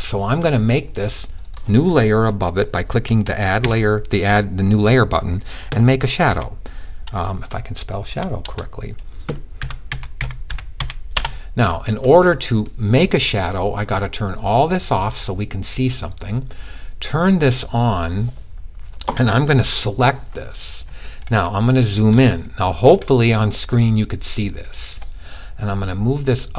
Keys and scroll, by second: 3.1 shift+s, 5.4-5.8 typing, 7.5 typing, 8.8-10.3 typing.